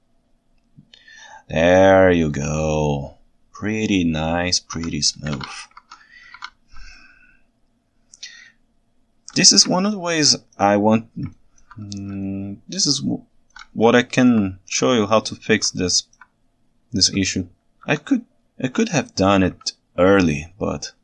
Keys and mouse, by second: 5.4 alt+a, 5.8 ctrl+Tab, 6.4 alt+a, 7.0-7.4 ctrl+shift+middle drag, 7.4 ctrl+shift+right click, 7.6 ctrl+shift+middle click, 7.8-8.7 ctrl+shift+right drag, 8.7 ctrl+shift+middle click, 8.8 ctrl+shift+right click, 8.9 ctrl+shift+middle click, 8.9 ctrl+shift+right click, 9.9 ctrl+alt+right click, 11.4 ctrl+alt+right drag, 12.3-12.8 ctrl+shift+right drag, 12.8-13.6 ctrl+shift+middle drag, 14.0 ctrl+alt+middle drag, 15.8-16.2 ctrl+alt+right drag, 17.9 KP_3, 18.9-19.5 ctrl+alt+right drag.